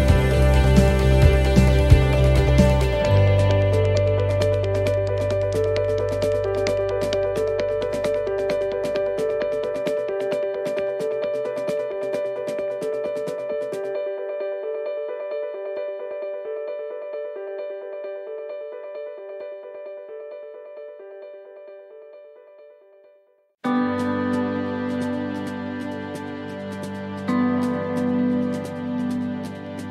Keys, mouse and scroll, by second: 18.5 right click, 21.4 scroll up 1, 22.2 click, 22.2 scroll up 1, 23.6 scroll up 1, 24.3 shift+middle click, 24.8 scroll up 1, 25.2 middle click, 26.0 shift+middle click, 26.4-26.9 scroll down 1, 26.9 middle click.